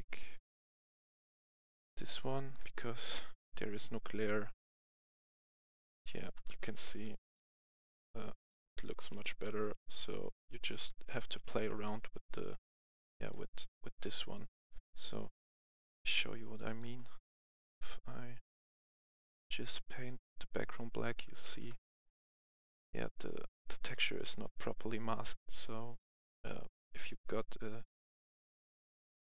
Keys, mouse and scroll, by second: 6.3 right click, 6.8 right click, 7.9-9.8 typing, 11.0 right click, 11.0 w, 11.0 s, 11.0 d, 12.5-13.6 typing, 13.2 click, 15.5-16.6 scroll down 1, 16.6 click, 17.0-17.3 scroll down 1, 18.6 click, 20.9-21.4 scroll up 1, 21.8-22.2 ctrl+scroll up 1, 22.3-22.7 alt+scroll up 1, 23.6-24.2 alt+scroll up 2, 26.9-27.3 alt+scroll down 1, 27.5-28.5 alt+scroll down 1.